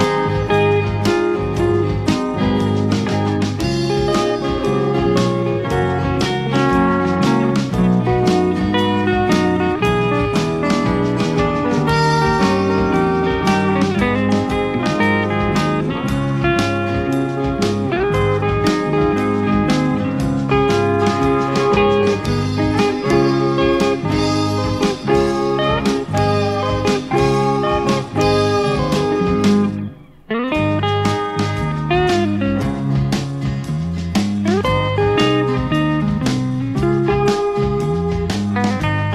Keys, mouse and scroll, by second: 1.7 shift+F6, 7.0 click, 8.3 click, 9.0 click, 10.5-14.3 drag, 15.1 click, 16.4 click, 17.1 click, 19.3-21.2 drag, 24.2 click, 25.4 click, 28.8-31.6 drag, 34.1 click, 34.9 click, 36.8-38.4 drag.